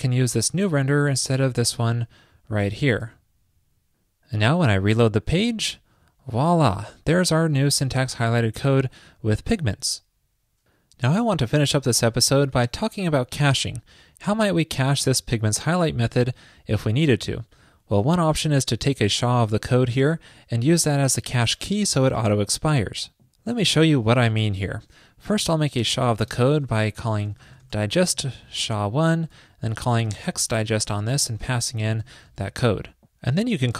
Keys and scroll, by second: 0.4 super+c, 2.9 super+v, 24.5 super+Return, 32.5 super+s.